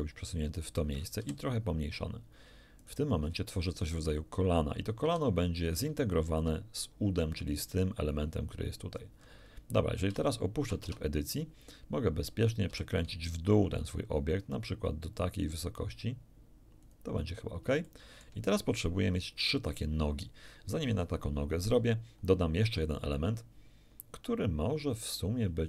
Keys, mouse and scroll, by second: 1.2 ctrl+s, 2.8 click, 3.2-4.1 scroll up 4, 5.0 s, 6.3 ctrl+click, 8.9-9.7 scroll down 4, 10.3 shift+click, 10.6 shift+middle click, 10.8 shift+Tab, 12.7 r, 16.8 ctrl+click, 17.4 ctrl+scroll down 2, 17.9 ctrl+shift+middle click, 18.4 shift+scroll down 2, 21.5-22.2 scroll up 2.